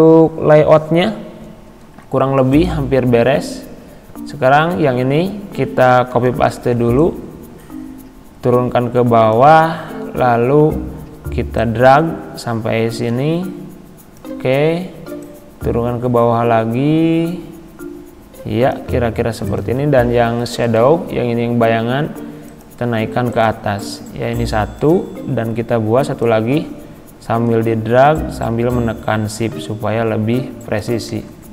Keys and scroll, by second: 6.2 ctrl+c.